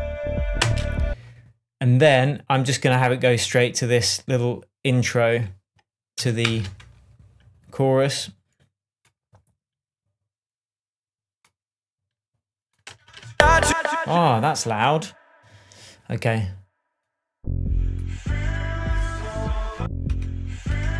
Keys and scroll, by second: 1.0 space, 6.9 shift+super+BackSpace, 13.3 space, 20.5 BackSpace.